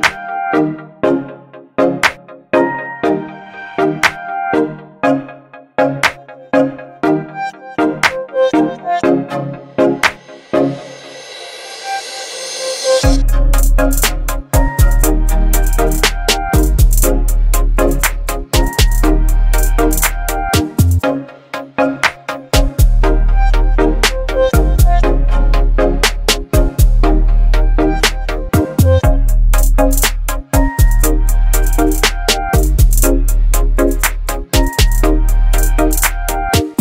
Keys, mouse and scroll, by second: 4.0 ctrl+t, 6.3-8.7 alt+drag, 9.1-10.8 shift+drag, 11.7 ctrl+0, 13.6 click, 17.2 ctrl+Num_Lock, 17.2 click, 17.3 ctrl+t, 19.5-22.7 alt+drag, 23.2-25.4 shift+drag, 29.0-30.1 drag, 31.4 shift+click, 33.0-35.1 shift+drag.